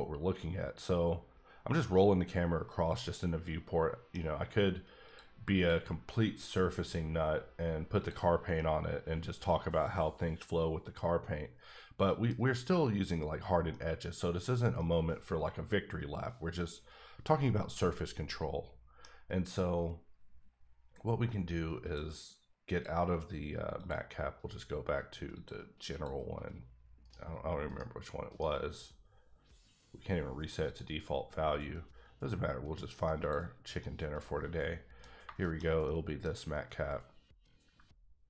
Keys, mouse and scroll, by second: 5.0 click, 5.5 click, 8.0 click, 8.5 middle click, 14.0-14.6 middle drag, 15.1 middle click, 21.8 click, 22.7 click, 23.9 click, 25.3 click, 25.9 click, 27.0 right click, 27.6 right click, 30.7 click, 33.2 click, 33.8-35.2 middle drag, 35.2 shift+middle click, 36.2 scroll up 1.